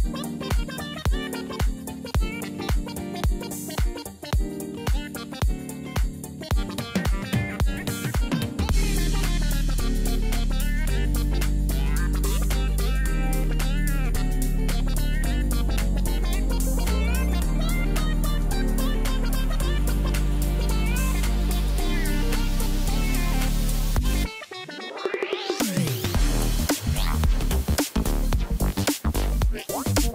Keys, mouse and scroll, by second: 8.0 double click, 10.9 double click, 12.8-19.8 drag, 25.6 click, 26.5 ctrl+-, 26.5 ctrl+-, 27.1 ctrl+-, 27.4 ctrl+=, 27.4 ctrl+-, 27.6 ctrl+=, 27.8 ctrl+t, 27.9 ctrl+t, 29.0 ctrl+t.